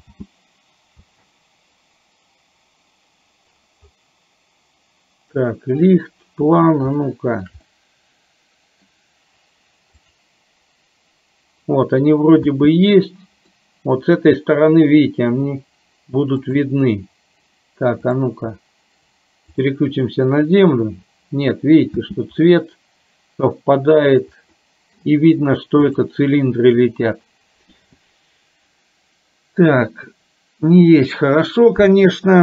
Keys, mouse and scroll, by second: 0.2 space, 1.2 space, 7.2 shift+middle click, 7.7-8.9 middle drag, 12.7 space, 13.8-15.2 middle drag, 18.1 click, 22.2 space, 24.6 middle click, 25.9 click.